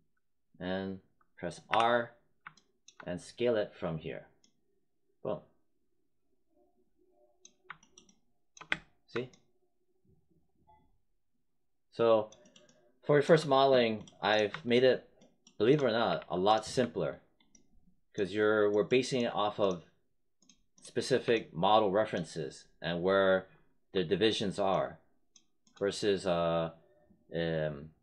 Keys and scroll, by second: 1.6 r, 8.6 space, 16.0 w.